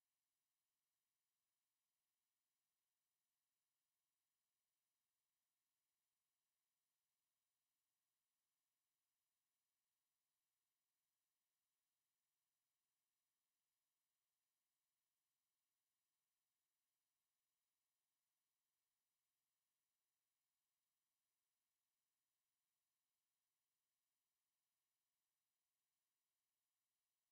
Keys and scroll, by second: 6.0 Escape.